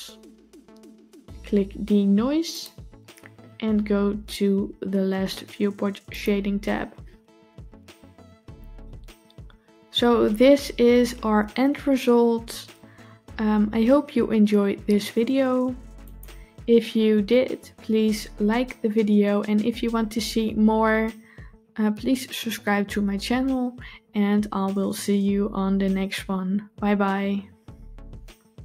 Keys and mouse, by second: 2.4 click, 15.9 click.